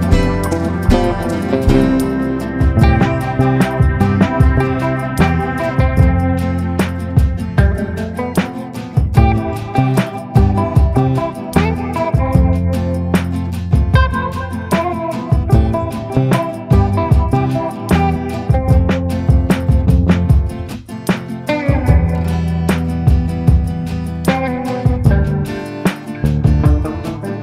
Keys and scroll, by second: 1.0 Caps_Lock, 1.6-4.7 typing, 5.4 ctrl+space, 9.5 Return, 10.1 ctrl+space, 10.4 F4, 11.4 c, 11.5 e, 12.2 F2, 13.4 ctrl+k, 15.0 c, 15.3 Escape, 18.0 c, 21.4 Escape, 24.9 ctrl+g, 25.6 c.